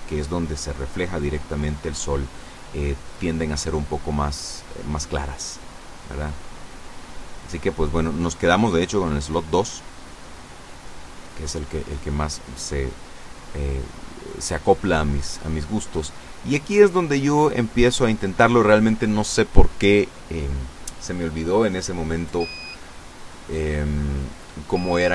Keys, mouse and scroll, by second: 0.4 click, 0.7 middle click, 1.2 click, 1.5-3.5 middle drag, 5.8 click, 6.7 click, 11.4 Escape, 12.6 KP_0, 14.9 right click, 21.8 shift+a, 23.8 click.